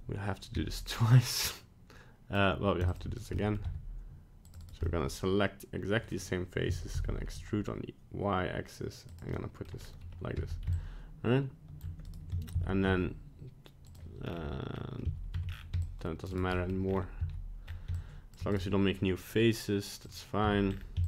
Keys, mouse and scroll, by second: 0.5 c, 3.3 middle click, 3.6 c, 4.8 middle click, 6.7 e, 9.3 middle click, 9.8-10.2 scroll up 1, 10.3 c, 12.5 ctrl+z, 13.9 click, 14.2 scroll down 4, 14.7 scroll up 1, 15.0 c, 16.5 middle click, 16.9 scroll up 2, 17.2 c, 20.0 click, 20.4 c.